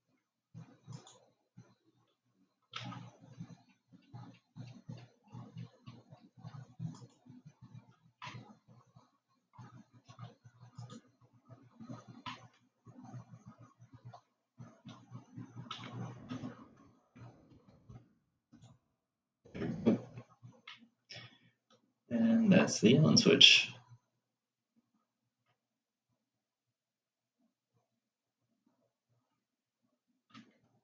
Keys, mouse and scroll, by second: 1.4 click, 3.5 e, 8.6-11.3 middle drag, 11.3 click, 13.0-16.3 middle drag, 16.3 g, 21.0-23.5 middle drag, 23.5-24.8 scroll down 3, 30.6-30.8 scroll up 5.